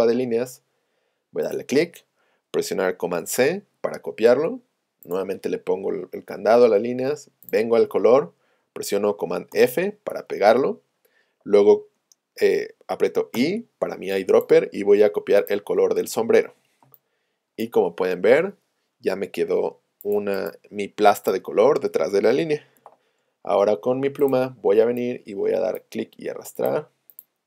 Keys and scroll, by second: 13.4 i, 22.8 p.